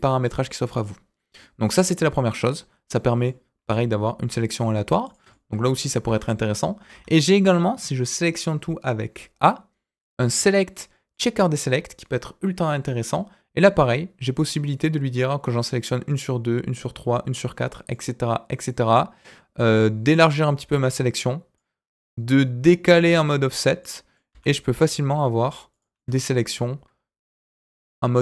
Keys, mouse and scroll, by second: 1.3-2.3 middle drag, 2.8 middle click, 3.6 s, 5.3 middle click, 6.0 ctrl+z, 6.9 a, 10.0-11.2 drag, 13.9-17.9 drag, 19.1-21.5 drag, 22.0-28.2 drag.